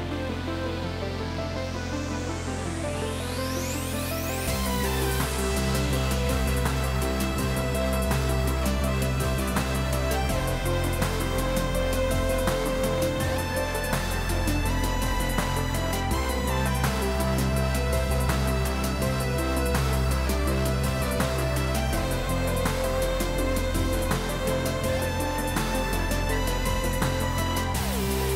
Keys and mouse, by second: 3.0 click.